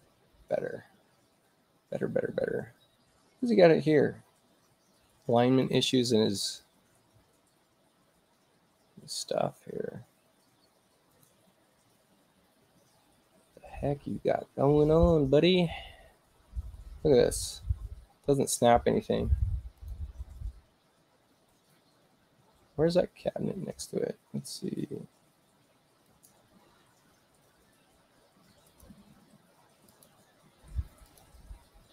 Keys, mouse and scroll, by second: 5.6 click, 8.3 space, 11.1 click, 18.4 u, 19.8 click, 26.0 click, 28.7 click, 29.9 click, 31.1 click.